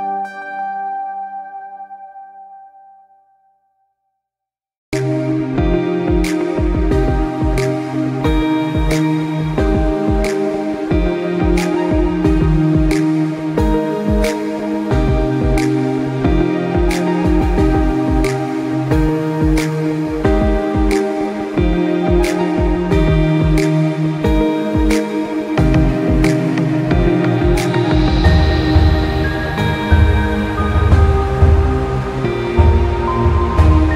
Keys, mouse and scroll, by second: 0.9 space, 1.2 click, 1.4 space, 6.0 click, 6.6 alt+scroll up 1, 7.2 scroll up 1, 13.0 click, 28.0 alt+scroll down 1, 29.0 space, 29.2 click, 29.5 space, 31.1 click, 31.2 space, 32.8 space.